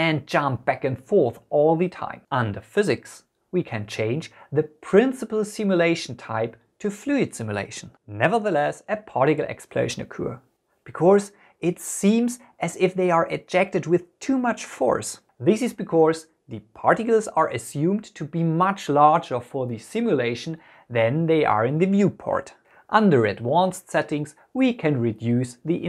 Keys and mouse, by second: 3.6 click, 6.9-8.9 drag, 10.0 space, 24.2 click.